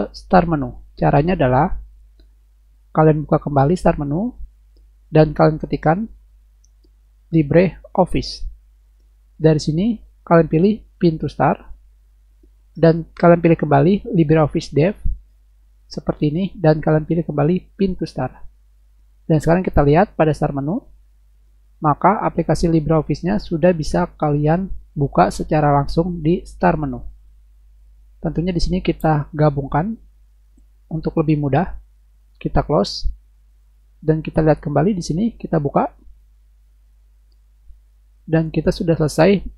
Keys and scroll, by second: 6.8-8.0 typing.